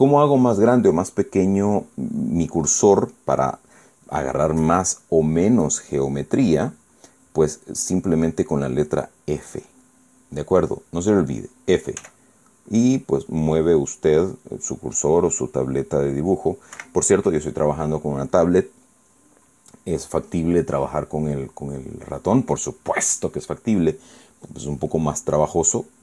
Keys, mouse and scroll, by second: 0.0 click, 12.7 f, 17.5 Escape, 23.4 click, 25.7 click.